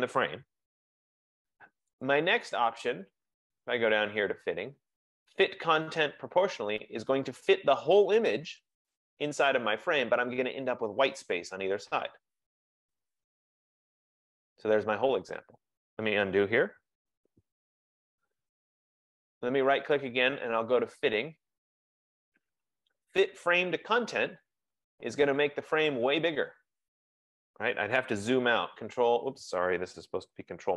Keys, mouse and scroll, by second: 0.9 ctrl+z, 0.9 click, 2.1 right click, 8.7 click, 11.3 F15, 17.4 ctrl+z, 19.0 right click, 25.7 click, 26.7 middle click, 28.7 super+-.